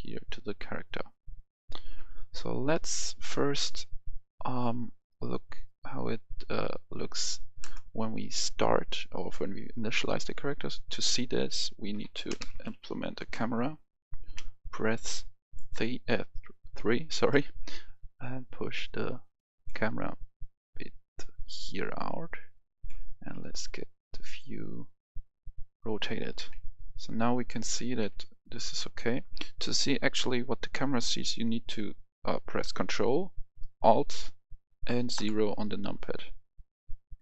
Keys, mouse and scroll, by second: 0.2-2.9 scroll up 1, 2.9 click, 5.3-7.7 scroll down 1, 7.7 space, 11.7-12.5 typing, 13.1 Return, 14.2 KP_3, 14.9 middle click, 15.7 KP_3, 16.8 scroll down 1, 18.0 click, 18.0 scroll down 1, 18.7-19.5 scroll down 1, 19.7-20.7 scroll down 1, 20.7-23.2 drag, 23.2 r, 24.4 click, 26.3 KP_1, 27.9 KP_3, 29.4-30.7 middle drag, 35.1 KP_0.